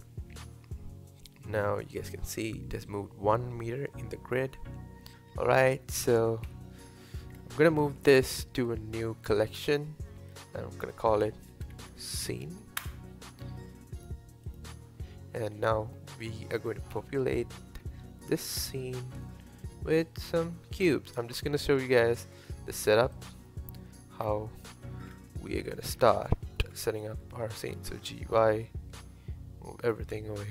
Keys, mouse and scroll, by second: 0.1-0.6 scroll down 2, 0.6-3.6 middle drag, 5.1 Tab, 5.5 Tab, 6.5 KP_1, 7.3-8.3 scroll up 2, 8.3 m, 15.5-15.9 scroll up 1, 15.9-16.9 middle drag, 16.9 KP_1, 17.8-18.2 scroll up 2, 19.1 shift+a, 20.8-21.2 scroll down 2, 21.2-21.9 scroll up 1, 21.9 s, 23.5-24.2 middle drag, 24.2-25.1 scroll down 3, 25.1 KP_7, 25.9-26.2 scroll down 3, 26.4 shift+middle click, 27.1-27.4 scroll up 1, 27.4 g, 30.1-30.5 scroll up 3.